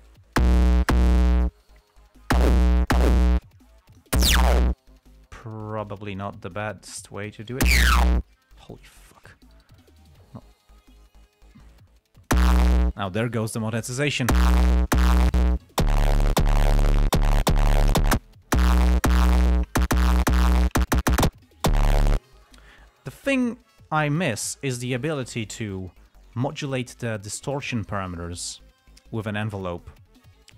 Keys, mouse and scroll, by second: 0.4-0.9 drag, 2.3-2.9 drag, 3.9-4.5 drag, 5.4-6.0 drag, 6.2-6.8 drag, 7.3 click, 8.9 click, 10.8-11.1 scroll up 2, 11.2 click, 22.8 click.